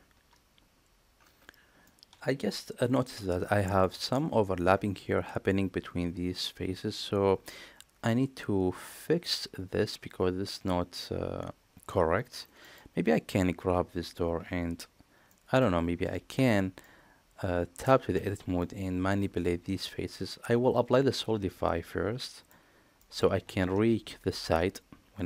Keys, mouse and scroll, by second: 1.7-2.8 middle drag, 3.5 middle click, 3.9 shift+middle click, 12.5 middle click, 12.9 click, 14.2 KP_Divide, 15.1-15.5 middle drag, 16.2 Tab, 16.7-17.7 middle drag, 18.0 Tab, 18.4-19.1 middle drag, 22.1 middle click, 22.8 middle drag.